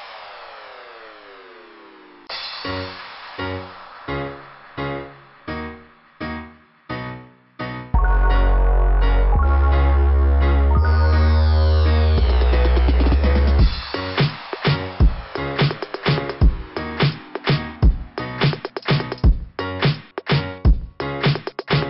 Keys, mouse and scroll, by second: 2.0 click, 2.2 click, 2.5 click, 4.1 click, 10.3 click, 10.6 click, 10.8 click, 10.9 click, 11.1 click, 11.2 click, 11.4 click, 11.5 click, 11.7 click, 11.8 click, 12.0 click, 12.1 click, 12.3 click, 20.8 click.